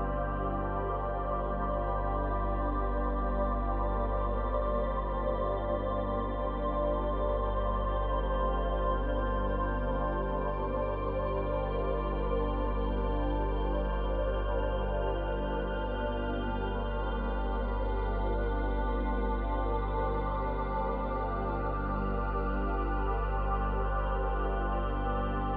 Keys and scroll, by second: 2.0 space, 7.3 space, 24.2 space.